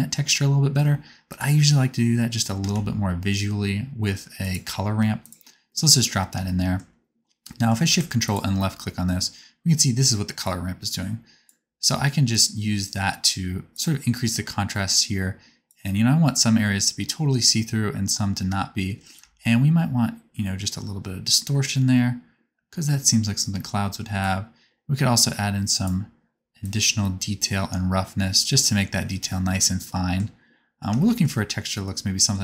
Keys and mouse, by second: 1.4-5.4 drag, 2.6 shift+a, 8.2 ctrl+shift+click, 8.2 ctrl+shift+middle click, 8.2 ctrl+shift+right click, 10.4 click, 10.4 middle click, 10.4 right click, 17.3-21.4 middle drag.